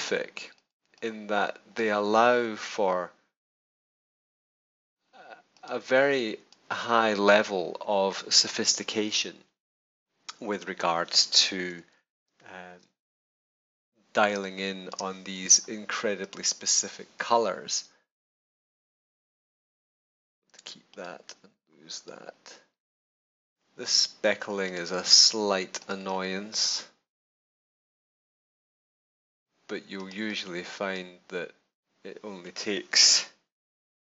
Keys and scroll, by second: 11.6 super+=, 12.7 super+space, 14.3 space, 33.7 super+-.